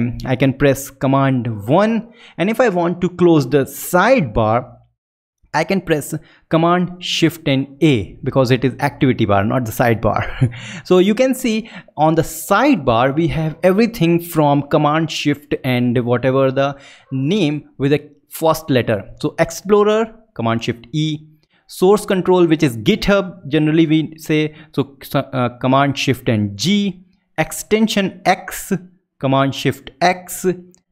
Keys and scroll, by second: 0.9 super+i, 7.5 shift+super+a.